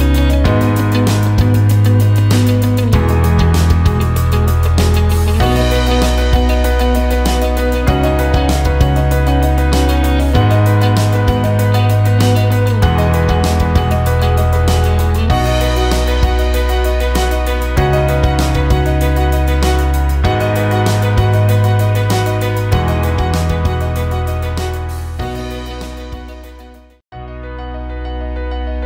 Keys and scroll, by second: 0.0-1.0 typing, 8.6 ctrl+space, 10.7 e, 18.6 ctrl+a, 19.6-20.8 typing, 24.9-27.3 typing.